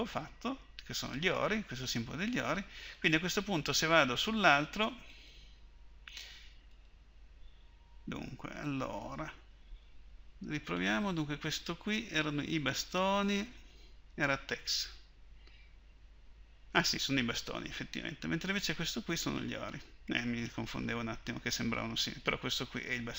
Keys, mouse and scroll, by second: 10.8-11.9 drag, 14.8-23.1 drag.